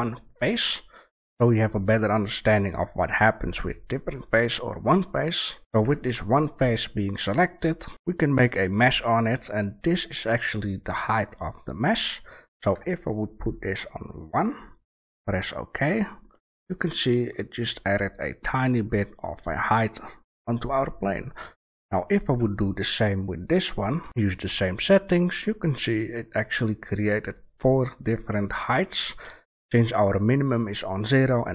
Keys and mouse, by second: 3.9-5.6 middle drag, 5.6 shift+a, 16.2-18.6 middle drag, 18.6-19.8 drag, 19.8-21.4 middle drag, 21.4 click, 23.0 right click, 23.9 shift+a, 25.4-25.7 middle drag, 26.2-28.0 middle drag, 28.2-31.5 middle drag.